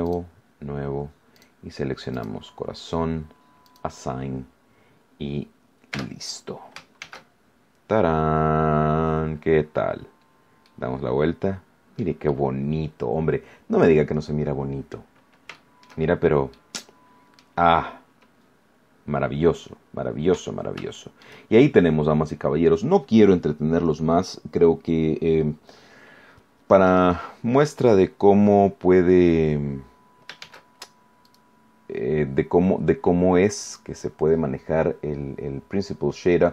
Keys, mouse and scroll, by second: 0.0 click, 1.3 click, 2.1 click, 3.6 click, 4.8-5.1 scroll down 1, 5.9 Tab, 6.9 shift+z, 7.5-7.9 scroll down 2, 8.9-9.6 scroll up 4, 9.9 scroll down 1, 10.6-12.1 middle drag, 12.2-15.1 middle drag, 15.5 shift+middle click, 16.1 shift+scroll down 2, 16.5-17.5 middle drag, 17.6-18.1 scroll up 2, 18.8 scroll down 1, 19.4 scroll down 1, 20.4 scroll down 1, 20.9 shift+middle click, 21.5 shift+scroll up 1, 22.3-22.7 scroll up 2, 23.5 scroll down 2, 24.5-25.3 scroll down 3, 26.8 right click, 27.7 right click, 30.3 shift+z, 31.2 right click, 33.6 click.